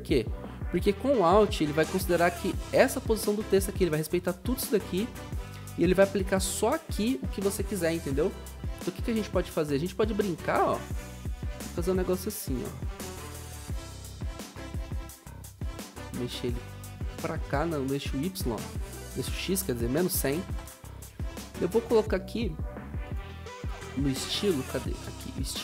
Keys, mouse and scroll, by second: 16.7 ctrl+z, 19.9-21.0 typing.